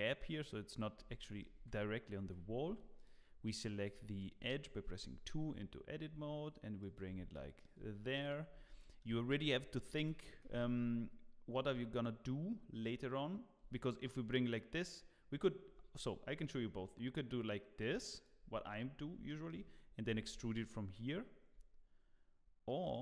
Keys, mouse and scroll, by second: 0.7 scroll down 1, 0.7 scroll up 1, 0.9 scroll down 2, 0.9 scroll down 1, 1.2 shift+middle click, 1.5 Tab, 2.3 3, 2.7 2, 2.9 click, 5.4 g, 7.3 shift+middle click, 8.1 click, 8.4 scroll up 3, 8.8 shift+middle click, 10.0 g, 19.0 scroll up 2, 19.3 shift+middle click, 20.1 g, 20.4 y.